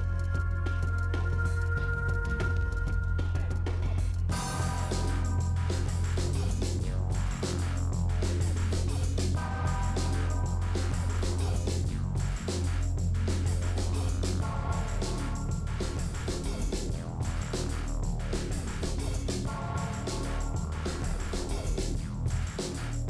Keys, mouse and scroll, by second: 0.6 click, 1.0 g, 2.3 z, 2.9 middle click, 3.1-3.5 scroll down 6, 3.2 middle click, 3.5 middle click, 3.8-4.1 scroll up 5, 4.1 middle click, 6.1 middle click, 6.6 KP_7, 7.0 click, 7.7 g, 8.9 click, 9.8 g, 11.0-12.9 middle drag, 12.9 click, 13.0 middle click, 13.7 Delete, 14.2 ctrl+z, 14.3 click, 14.5 l, 14.7 click, 15.1 l, 15.3 Delete, 15.5 middle click, 16.4 l, 16.6 l, 17.1 click, 17.5 middle click, 18.0 scroll down 1, 18.1-19.3 middle drag, 19.3 scroll down 1, 19.9 KP_7, 21.0 click, 21.2 shift+middle click, 21.8 ., 22.7 r.